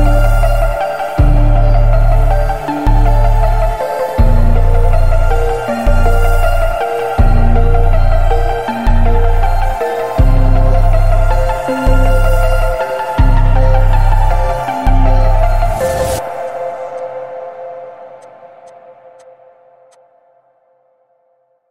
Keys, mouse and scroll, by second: 0.1 space, 1.0 click, 2.0 alt+scroll down 1, 2.5 space, 2.6 click, 2.8 space, 3.6 click, 3.7 space, 4.8 alt+click, 5.4-6.0 alt+click, 8.6 alt+scroll up 1, 8.8-9.5 alt+drag, 10.1-10.4 alt+scroll up 1, 10.7 click, 14.3 alt+right click, 14.9-19.4 alt+drag, 17.1-17.4 alt+click, 19.4 space, 19.9 click, 21.0-21.4 alt+scroll down 1, 21.4 alt+scroll up 1, 21.5 alt+right click.